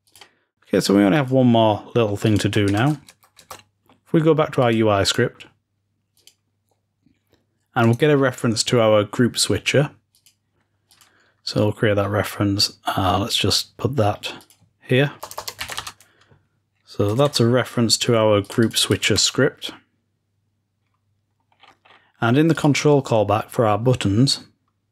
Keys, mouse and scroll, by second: 0.1-1.0 drag, 1.2 click, 2.3 click, 2.7 ctrl+s, 4.5 click, 4.9 click, 5.0 click, 5.1 click, 6.2 click, 7.9-9.0 drag, 10.0-13.4 drag, 14.3-15.6 drag, 15.6 ctrl+v, 17.7-18.3 scroll up 1, 18.3 click, 18.3-18.9 scroll up 1, 21.4-22.4 scroll down 2, 22.4-24.2 drag.